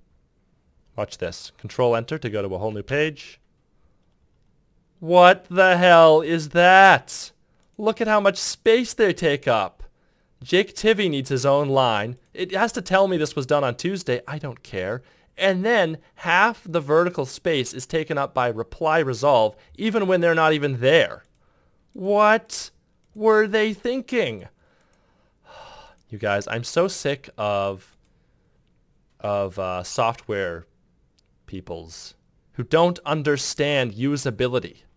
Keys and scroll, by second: 2.6 ctrl+Return.